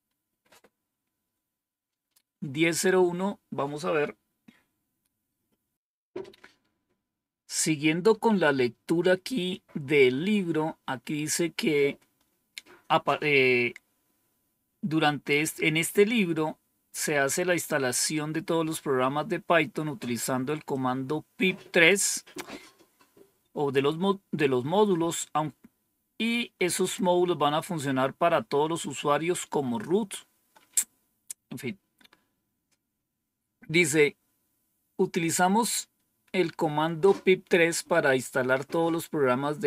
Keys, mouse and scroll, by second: 20.6-21.8 drag.